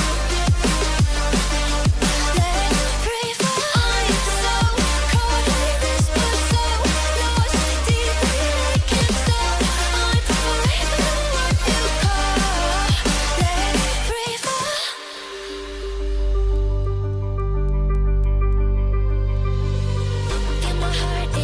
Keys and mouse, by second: 0.1-4.6 drag, 4.6 Left, 4.6 Left, 4.8 Left, 5.1 Left, 7.9 i, 9.8 space, 12.8 space, 13.5 Left, 13.9 Right, 14.3-16.4 middle drag, 16.4-21.4 right drag, 17.7 g, 20.2 g.